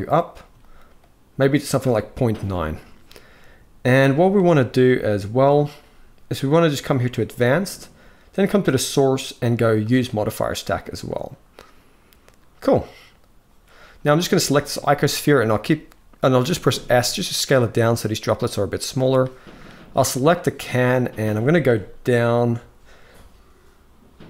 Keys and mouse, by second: 0.4-1.4 shift+drag, 6.8 click, 8.0 click, 9.5 click, 14.5 shift+middle click, 16.3 s, 19.6 click.